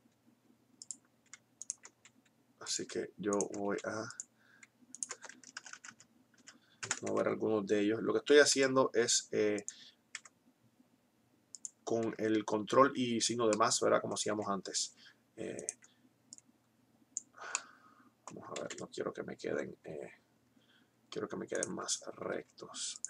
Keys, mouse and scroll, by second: 1.1 click, 1.9 s, 3.8 s, 5.6 ctrl+KP_Add, 8.4 g, 9.6 r, 11.4 click, 12.1 Tab, 13.9 Tab, 15.4-17.4 right drag, 18.6 ctrl+z, 21.9-23.0 right drag, 21.9 s.